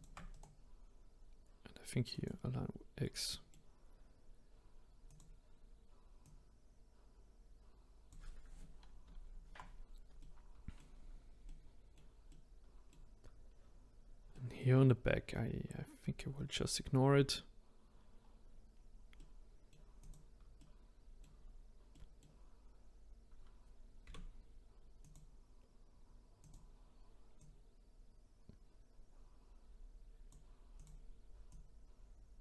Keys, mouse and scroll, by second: 0.3-3.2 right drag, 3.2-5.0 middle drag, 5.0 click, 6.2 click, 9.0 ctrl+z, 10.2 middle click, 11.0-11.4 scroll down 2, 11.4-17.3 middle drag, 18.2-19.1 scroll down 1, 19.1 middle click, 20.0 click, 20.5 middle click, 21.3-21.9 scroll up 1, 21.9-24.0 middle drag, 24.0 a, 25.0 click, 26.4 click, 27.3 click, 30.7 click, 31.5 click.